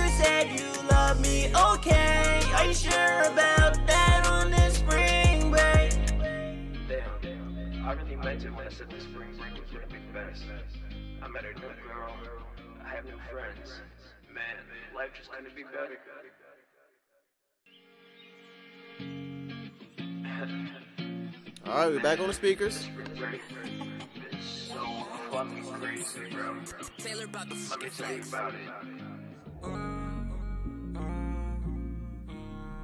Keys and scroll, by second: 0.1 super+s, 4.3 super+s, 16.6 space, 17.4 super+s.